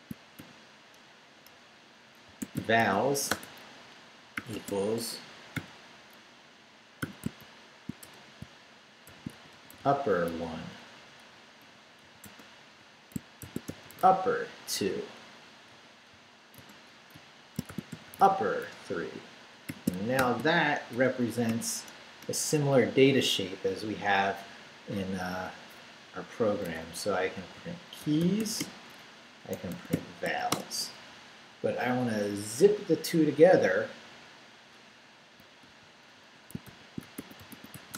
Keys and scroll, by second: 0.4-3.3 typing, 1.4 Return, 4.4 =, 4.5 space, 5.5 [, 7.0-10.3 typing, 11.6-21.4 typing, 22.2 Return, 27.3-30.7 typing, 35.2-37.9 typing.